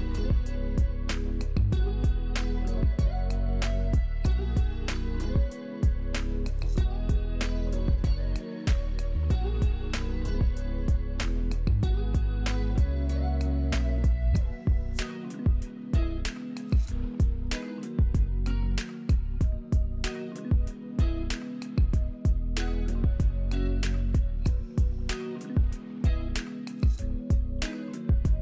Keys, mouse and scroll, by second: 5.7 shift+right click, 7.1 s, 9.7 right click, 10.7 alt+middle click, 12.3 s, 12.5 right click, 12.6 right click, 22.3-25.0 typing, 25.1 Return, 28.2 F3.